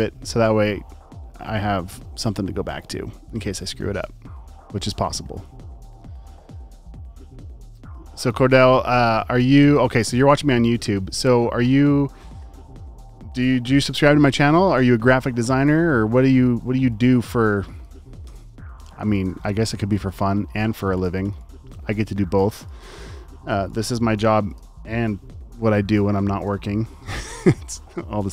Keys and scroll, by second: 15.3 space, 15.9 super+space, 16.5 space, 16.6 space, 18.3 BackSpace, 18.6 space, 19.2 alt+super+space, 22.6 space, 23.6 space, 26.4 super+s.